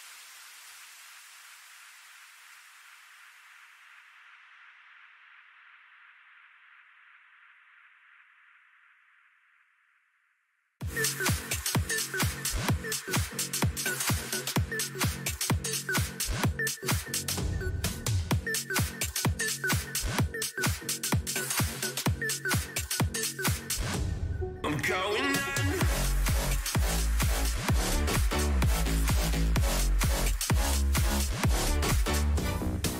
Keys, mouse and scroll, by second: 1.6-3.4 drag, 6.5-8.0 drag, 8.0 right click, 8.3 middle click, 8.9 Tab, 9.4 a, 9.8 a, 11.5 b, 14.3-16.5 drag, 16.5-18.9 middle drag, 18.9 ctrl+z, 19.9-21.3 middle drag, 21.3 KP_3, 25.3-27.7 drag, 26.7 a, 27.7 b, 29.8 right click, 31.6-32.9 middle drag.